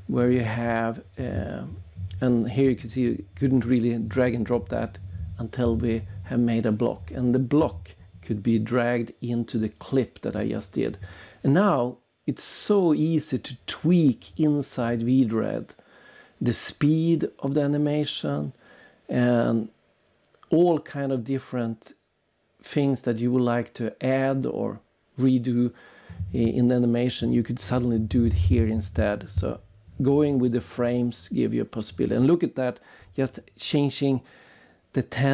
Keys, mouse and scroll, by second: 1.8 click, 5.6 click, 7.4 click, 10.6-11.1 scroll down 3, 12.4 click, 13.0-13.5 scroll down 3, 15.2 click, 19.8 click, 21.0 click, 22.1 click, 22.2 click, 25.4 click, 26.0 click, 27.2 click, 27.9 click, 29.1 click, 29.5 click, 29.6 click, 30.2 click, 31.6 click.